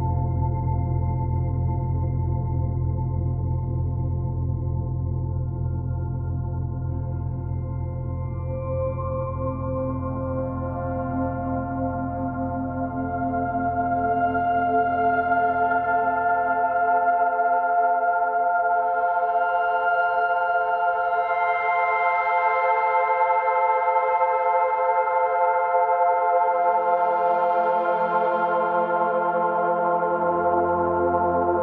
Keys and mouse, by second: 4.5-10.2 drag, 10.2 typing, 12.4 click, 14.1-15.7 drag, 16.5 alt+click, 17.8 alt+click, 18.8 ctrl+z, 19.3 alt+click, 21.4-27.6 drag, 27.6 f, 28.2 click, 30.4-31.6 drag.